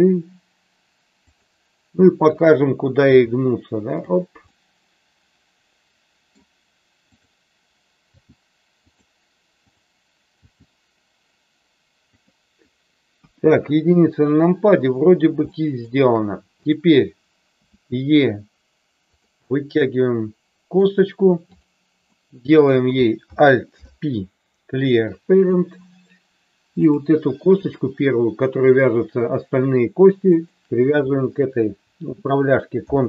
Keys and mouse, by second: 1.2 click, 2.2 click, 2.9 g, 4.6-6.3 middle drag, 7.1 click, 8.1 g, 9.7 click, 10.3 g, 12.0 click, 13.1 KP_1, 15.5 shift+middle click, 16.6 click, 17.6 e, 19.4-20.7 middle drag, 22.0 middle click, 23.6 alt+p, 30.3 shift+click, 32.7 ctrl+p.